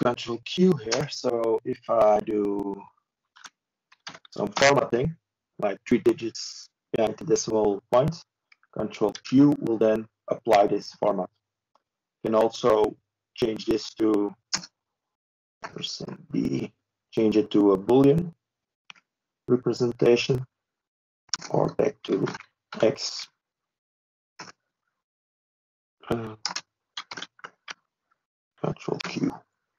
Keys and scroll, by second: 0.3 ctrl+z, 5.7 ctrl+space, 6.9-7.7 typing, 9.0 ctrl+c, 15.4 ctrl+space, 15.8-17.2 typing, 18.5 ctrl+shift+b, 18.5 typing.